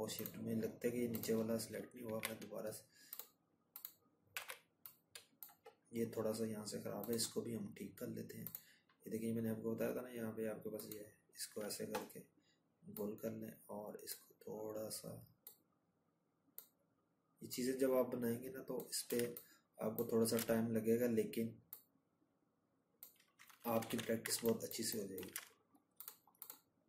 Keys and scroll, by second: 0.3 z, 19.4 ctrl+-, 19.5 ctrl+-, 21.0 ctrl+-, 24.8 ctrl+z, 26.4 ctrl+-.